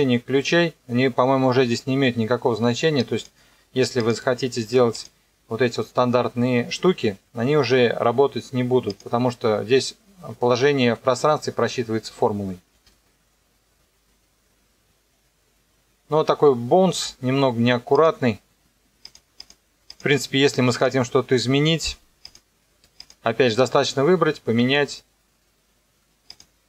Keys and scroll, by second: 12.7 KP_0, 16.9 space, 24.6 KP_0.